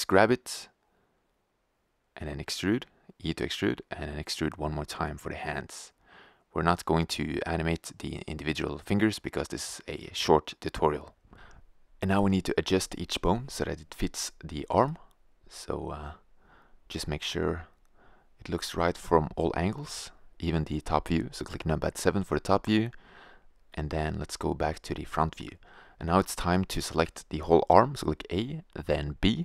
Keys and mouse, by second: 0.7 click, 1.4 e, 3.1-4.1 drag, 3.3 e, 4.5-5.5 drag, 5.0 KP_3, 6.4 b, 8.1 r, 9.7 g, 10.9-12.4 drag, 13.0 g, 13.7 click, 14.0 r, 14.6 click, 16.2 right click, 16.7 g, 17.1 click, 17.2 click, 17.9 click, 18.7 KP_7, 19.5 g, 20.7 click, 20.9 click, 21.2 click, 21.9 middle click, 22.5 KP_1, 26.9 a, 27.6 b.